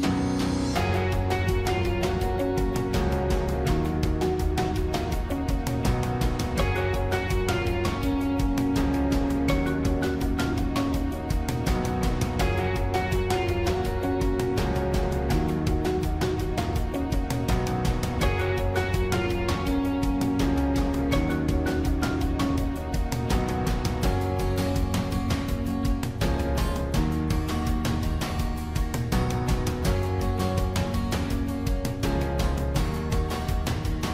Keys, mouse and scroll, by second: 1.3 ctrl++, 2.6 ctrl++, 14.4 ctrl++, 18.3 ctrl++, 21.1 ctrl+-, 21.4 ctrl++, 23.7 ctrl++, 24.6 ctrl+-, 29.7 ctrl+-.